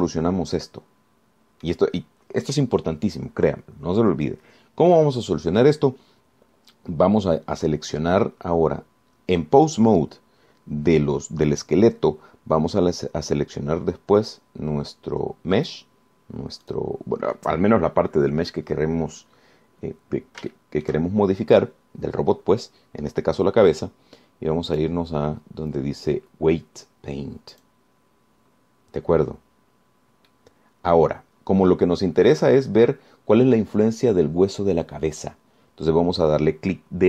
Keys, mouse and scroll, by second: 0.7 Escape, 1.2-3.0 drag, 3.1-3.4 scroll up 1, 3.4-3.8 scroll down 1, 16.8 click, 17.9 click, 21.7 shift+click, 25.9 click, 28.8 click, 31.5-34.0 drag.